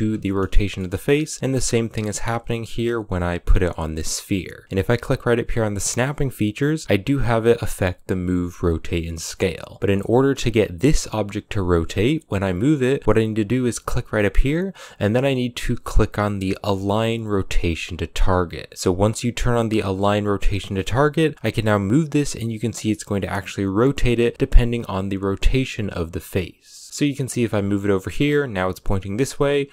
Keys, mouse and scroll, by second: 0.0-0.7 middle drag, 0.7 g, 21.6 g, 26.9 shift+middle click, 27.1 g.